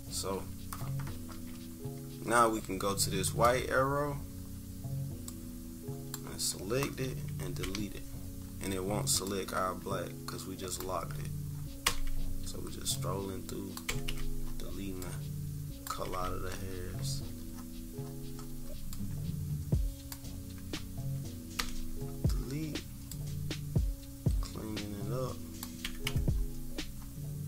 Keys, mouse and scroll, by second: 0.2-3.2 scroll up 2, 3.2-6.1 drag, 7.6 Delete, 8.3-8.9 scroll up 4, 9.2-10.8 drag, 11.1-11.6 scroll up 2, 11.9 Delete, 12.4 scroll up 2, 12.9 click, 13.8 Delete, 14.0 Delete, 14.4-14.9 scroll up 2, 14.9 click, 15.4 click, 15.8 Delete, 17.0 -, 17.2-17.7 scroll up 2, 18.0-18.5 scroll up 4, 18.9-21.4 drag, 21.5 Delete, 21.9-22.5 scroll down 4, 23.0-25.8 drag, 25.8 Delete, 26.0 Delete, 26.3-27.1 scroll up 4.